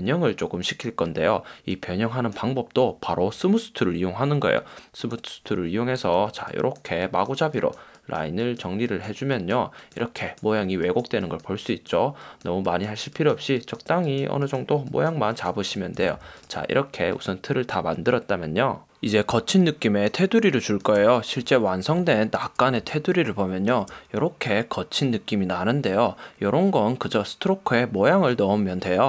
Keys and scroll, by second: 16.2 v, 19.4 space, 22.9 space.